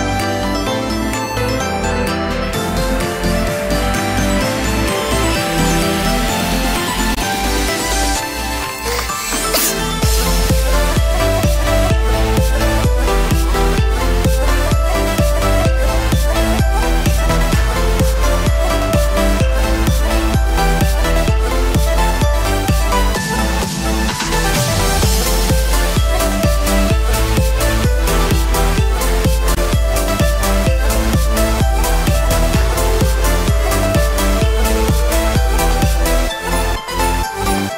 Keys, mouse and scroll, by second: 0.5-0.9 scroll down 4, 0.9 shift+middle click, 1.4 middle click, 1.7 shift+middle click, 2.7 click, 11.0 middle click, 11.6 shift+middle click, 12.1 scroll up 2, 12.3 shift+middle click, 17.8 click, 20.8 click, 24.0 alt+a, 24.2 Tab, 24.6 middle click, 25.2 scroll down 3, 25.5 shift+middle click, 26.3 middle click, 26.9 scroll up 5, 27.2 shift+middle click, 27.5-28.5 scroll down 2, 30.5 shift+middle click, 31.0 Tab, 33.7 click, 33.8 l, 36.1 middle click, 36.6 scroll down 3, 36.9 shift+middle click, 37.2 middle click, 37.5 shift+middle click.